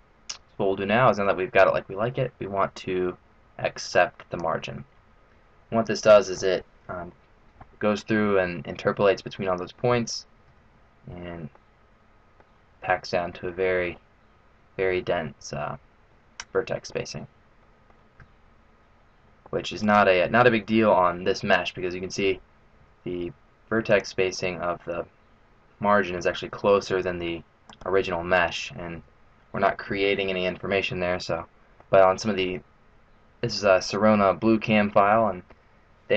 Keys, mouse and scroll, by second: 1.4 scroll down 4, 3.9 click, 6.0 middle click, 6.7-7.6 scroll up 2, 10.5 Tab, 11.1-11.5 scroll up 4, 11.5 middle click, 13.0-13.5 scroll up 2, 13.5 middle click, 15.8-16.5 scroll down 4, 16.5 middle click, 16.9-17.6 scroll down 1, 17.6 middle click, 17.6-18.1 scroll down 1, 18.2 Tab, 19.9 right click, 21.0 Tab, 22.9 Tab, 23.9 right click, 24.4 Tab, 26.7 Tab, 27.7 right click, 28.3 Tab, 29.0 Tab, 31.2 middle click.